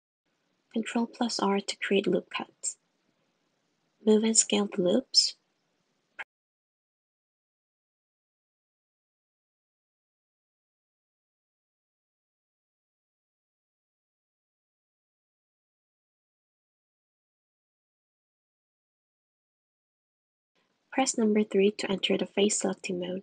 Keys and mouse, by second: 0.1 Tab, 1.5 super+r, 4.2 click, 4.8 s, 5.3 g, 6.8 click, 7.3 g, 7.8 s, 9.5 super+r, 15.5 super+r, 22.4 3.